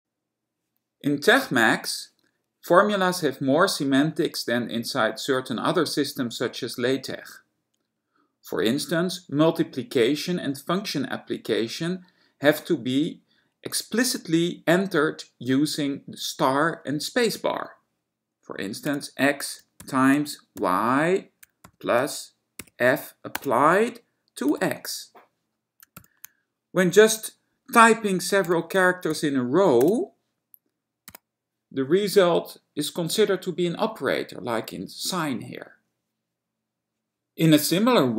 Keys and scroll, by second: 19.1 x, 20.0 *, 20.7 y, 22.7 f, 23.4 space, 24.6 x, 28.3-29.9 typing, 31.2 x.